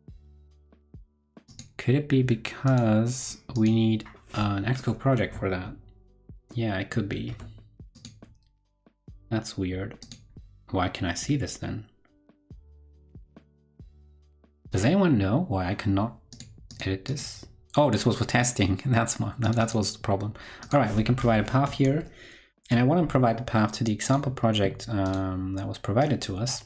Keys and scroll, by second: 22.3 ctrl+Left.